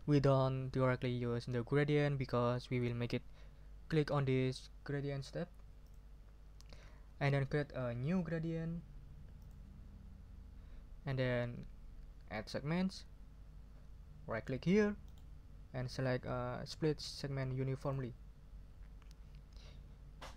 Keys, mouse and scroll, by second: 5.8 click, 9.4 click, 17.8 click.